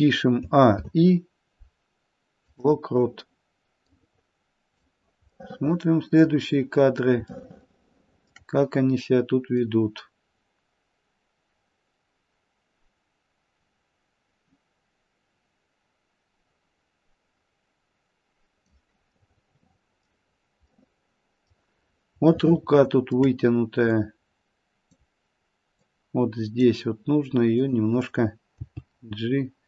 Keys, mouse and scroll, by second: 0.4 a, 0.7 i, 3.9 click, 5.4 middle click, 6.1 middle click, 7.3 shift+middle click, 9.6 click, 19.1 middle click, 20.2 middle click, 20.2-21.0 scroll down 2, 20.6 middle click, 21.8-22.4 scroll up 1, 22.4 shift+middle click, 22.4 scroll up 2, 23.9 click, 25.8 click, 28.6 g.